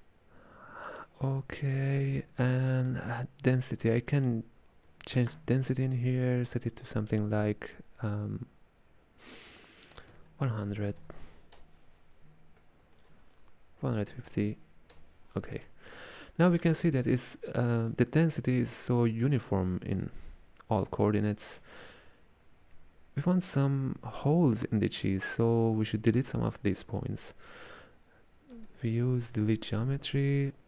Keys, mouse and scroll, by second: 5.4-8.5 drag, 11.0 KP_0, 13.1-16.2 drag, 16.2-18.0 middle drag, 18.0 click, 19.3 middle click, 20.1 click, 21.2-24.3 middle drag, 28.6 space.